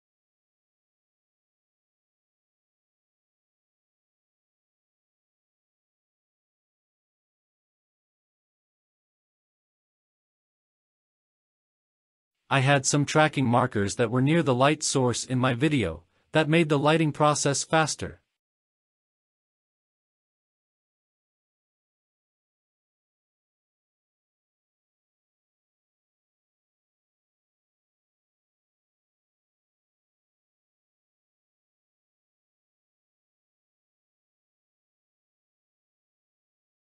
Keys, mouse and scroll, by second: 1.9 click, 3.3-3.8 scroll up 3, 4.5-4.9 scroll down 2, 8.3 scroll down 1, 8.4-8.8 middle drag, 8.9-9.5 scroll down 3, 9.5 click, 9.5-9.9 scroll up 3, 9.9 scroll down 3, 10.0 middle click, 10.1 click, 10.5 click, 10.6 shift+middle click, 10.6 scroll up 1, 11.1 click, 11.1 middle click, 11.3 middle click, 11.7 KP_7, 11.8-12.2 scroll down 6, 11.9 shift+middle click, 12.2 shift+middle click, 12.4 scroll up 4, 12.7 shift+middle click, 12.7 scroll down 1, 13.0-13.3 scroll down 4, 13.1 shift+middle drag, 13.3-13.6 scroll up 5, 13.8 KP_0, 14.0-14.5 scroll up 6, 14.1 shift+middle drag, 14.3 shift+middle click, 14.6-15.1 scroll down 5, 14.8 click, 15.1 shift+middle click, 15.1 scroll up 2, 15.6 shift+middle click, 15.8 middle click, 16.0 scroll down 1, 16.1 shift+middle click, 16.3 shift+middle click, 16.3 scroll up 5, 16.5 middle click, 17.1 click, 17.3 KP_7, 17.5 scroll up 1, 17.7 scroll down 2, 17.8 shift+middle drag, 18.1 scroll down 3, 18.6 g, 18.7 click, 19.3 shift+middle click, 19.3 scroll up 2, 19.4 shift+middle click, 19.6 click, 19.6 g, 20.2 click, 20.2 scroll down 6, 20.4 scroll up 4, 20.5 g, 20.7 click, 20.8 KP_0, 20.9-21.2 scroll down 5, 20.9 middle click, 21.4 scroll up 1, 21.8 ctrl+s, 21.8 KP_0, 21.9 scroll up 1, 22.1 click, 22.5-22.9 scroll up 3, 23.1 scroll down 3, 24.2 click, 25.3-26.3 drag, 29.2-30.5 drag, 31.9 click, 34.4 drag, 34.9 click, 35.3 click, 35.6 click, 36.2 click.